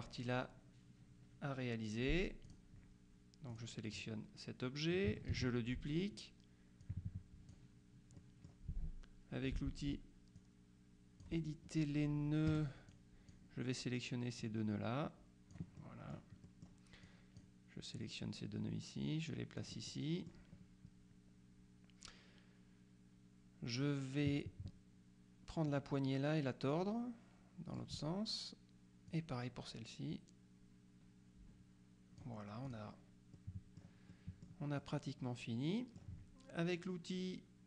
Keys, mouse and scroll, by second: 2.5 click, 3.6 click, 5.4 ctrl+d, 6.9 click, 8.3 middle click, 10.4 click, 12.6 F2, 13.0 click, 14.5-16.1 drag, 16.5 click, 17.1 click, 18.0-20.2 drag, 25.8-28.3 drag, 29.2-32.8 drag, 33.4 click, 33.6 middle click, 34.9 middle click.